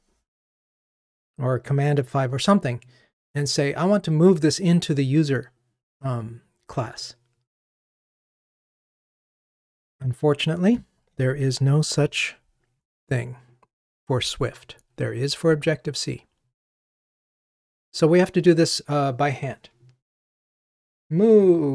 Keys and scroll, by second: 12.1 ctrl+t.